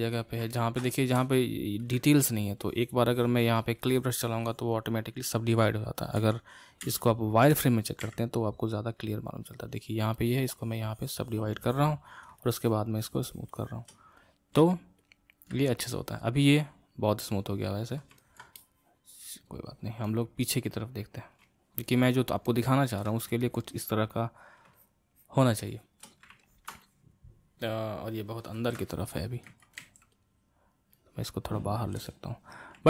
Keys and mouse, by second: 0.5-2.7 ctrl+middle drag, 2.7-6.4 drag, 6.4 ctrl+z, 7.0 ctrl+z, 8.0 q, 10.2-14.5 drag, 14.5 q, 15.9-23.4 middle drag, 23.4-26.4 drag, 26.4-29.5 ctrl+middle drag, 29.5 g, 29.8 f, 31.0-32.8 drag.